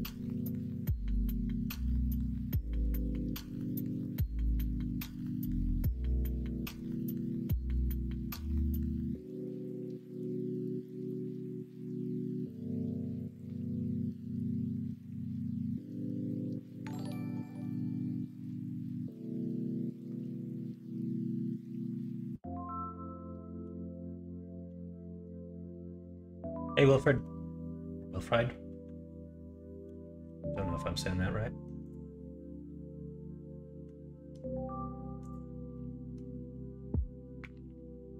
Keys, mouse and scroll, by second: 1.2 middle click, 2.5 Tab, 3.2 shift+middle click, 4.0 middle click, 5.2 ctrl+r.